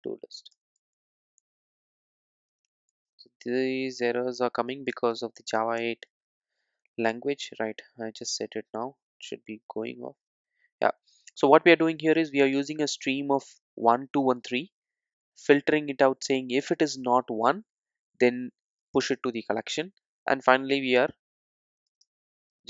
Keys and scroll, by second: 1.4 Return, 5.0 alt+Return.